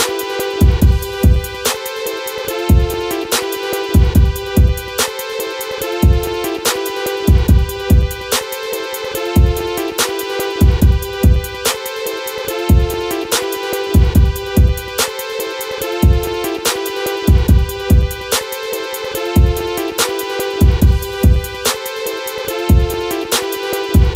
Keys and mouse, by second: 0.7-2.3 right drag, 4.8 s, 6.4 click, 6.9-8.8 drag, 9.2 s, 9.6 click, 11.1 click, 12.3 Delete, 15.2 click, 16.3 click, 17.8 ctrl+shift+b, 21.1 a, 22.1 KP_1, 23.3 KP_1, 23.9 middle click.